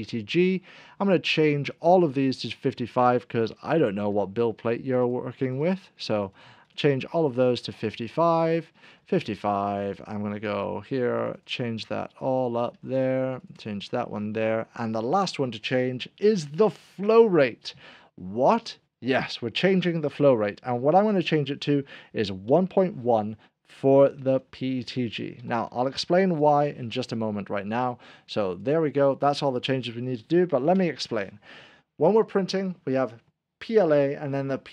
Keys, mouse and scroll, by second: 3.9 5, 4.9 click, 7.0 scroll down 1, 7.0 5, 7.3 5, 7.9 click, 8.9 5, 9.8 click, 10.3 5, 11.2 click, 12.5 5, 12.5 5, 13.4 click, 14.1 5, 15.1 click, 20.5 click, 22.4 5, 22.4 ., 22.6 1, 24.2-25.5 typing, 26.4 click, 28.5 click.